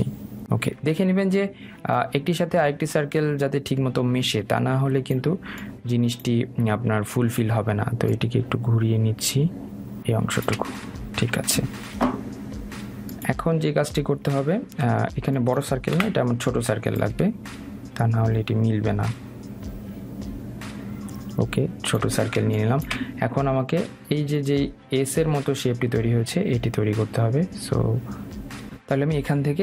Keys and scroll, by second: 16.7 Delete.